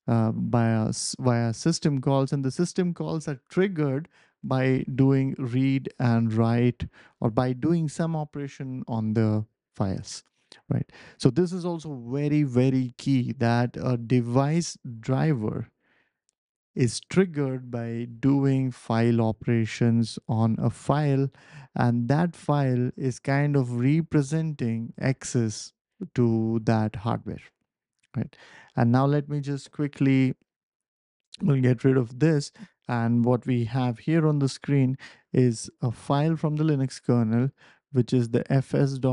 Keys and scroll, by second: 31.2 BackSpace, 31.9 w.